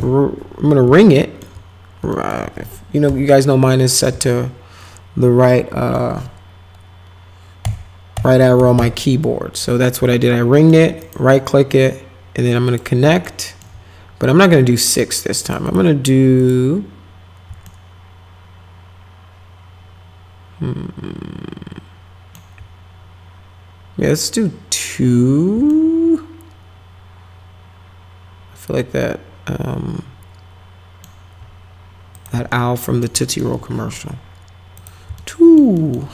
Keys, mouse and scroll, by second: 1.0 alt+middle click, 2.1 alt+middle click, 3.1 p, 3.7 middle click, 4.2-5.9 alt+middle drag, 7.6 Right, 8.1 Right, 8.4 Right, 8.6 Right, 8.8 Right, 10.2 alt+middle click, 11.0 right click, 12.7 click, 13.3 alt+middle click, 15.0 click, 15.4 click, 15.6 click, 16.4 click, 17.7-22.4 alt+middle drag, 25.7-31.0 alt+middle drag, 32.1 click, 32.5 alt+middle click, 33.2 middle click, 34.8 click, 35.2 alt+middle click, 35.8 alt+middle click.